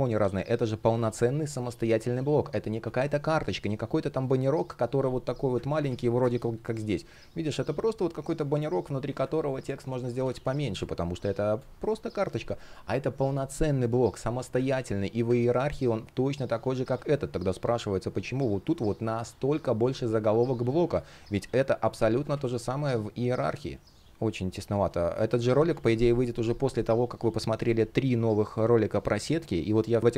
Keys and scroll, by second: 2.2 super+z, 5.3 super+z, 5.8 space, 9.6 super+z, 10.4 space, 14.3 super+z, 15.0 super+z, 16.5 super+z, 19.7 super+z, 21.7 super+z, 22.8 space, 24.9 super+z.